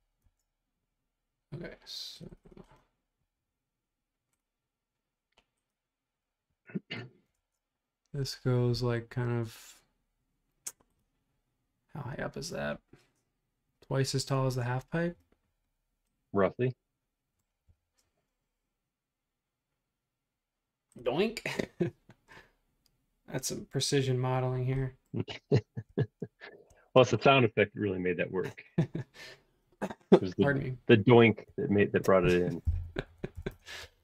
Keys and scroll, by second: 0.2 super+Tab, 7.4 super+Tab, 14.4 super+Tab, 17.7 r, 31.2-33.9 typing.